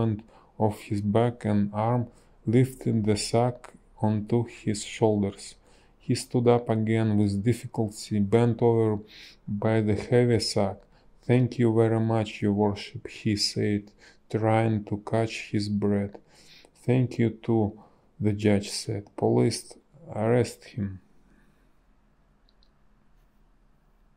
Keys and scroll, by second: 8.1 ctrl+z, 17.8 ctrl+z.